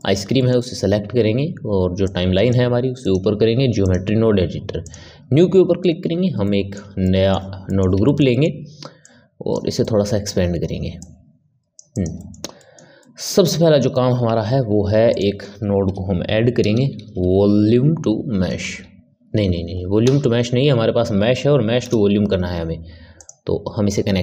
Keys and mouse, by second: 2.0-6.0 drag, 6.0 n, 6.4-9.0 middle drag, 9.0 click, 9.8-10.9 middle drag, 10.9 click, 11.9 click, 12.1-14.3 middle drag, 14.3 shift+a.